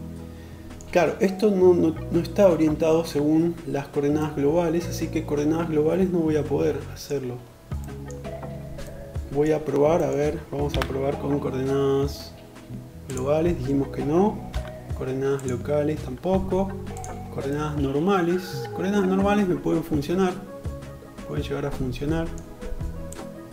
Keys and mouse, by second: 15.4 ,, 22.4-23.5 drag.